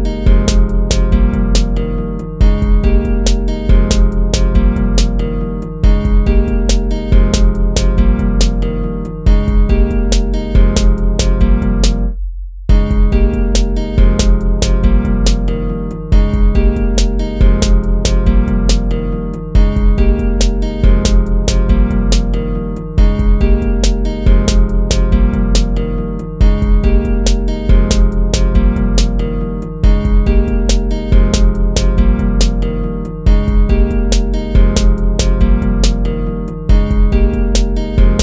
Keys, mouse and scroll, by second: 0.2 ctrl+-, 2.1 ctrl++, 2.3 ctrl++, 18.6 ctrl+-, 20.3 ctrl++, 23.0 ctrl+-, 24.0 ctrl+-, 25.6 ctrl+z, 26.2 ctrl+-, 27.8 ctrl+-, 28.4 ctrl+-, 35.6 ctrl+z.